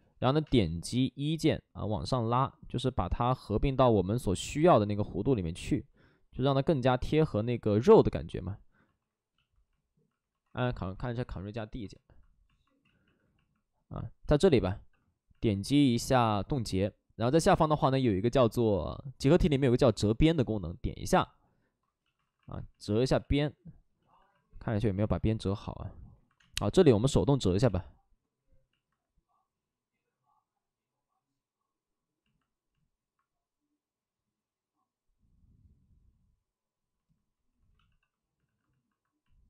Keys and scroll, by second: 0.1 x, 0.3 space, 8.7 ctrl+d, 10.2 ctrl+d, 12.7 ctrl+d, 12.7 ctrl+z, 12.9 ctrl+z, 14.2 shift+f, 15.2 alt+s, 15.2 shift+f, 21.1 ctrl+d, 21.6 ctrl+d, 22.1 alt+s, 23.1 ctrl+z, 23.3 ctrl+z, 23.9 shift+f, 24.9 alt+s, 26.3 space, 27.3 b, 37.3 ctrl+d, 37.7 shift+f, 38.3 alt+s, 38.7 alt+s.